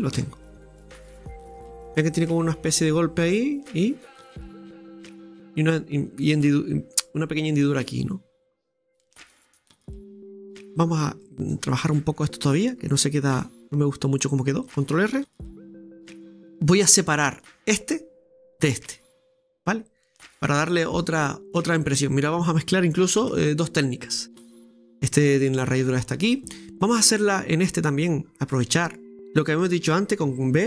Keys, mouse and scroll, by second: 0.8 middle click, 1.5-2.2 scroll down 5, 2.2-5.2 middle drag, 6.2-8.5 middle drag, 8.5 scroll down 2, 8.7-10.7 middle drag, 10.7-11.2 scroll up 4, 11.2 shift+middle click, 12.2-12.9 scroll up 3, 12.9 Tab, 13.4 shift+middle click, 15.2 scroll up 1, 15.2 ctrl+r, 19.5-20.0 scroll up 2, 20.0-23.1 middle drag, 23.8 scroll down 1, 24.2-25.8 middle drag, 25.9-27.1 scroll down 2, 27.1-28.1 shift+middle drag, 28.1-28.5 scroll up 5, 28.5 middle click, 29.2 shift+right click.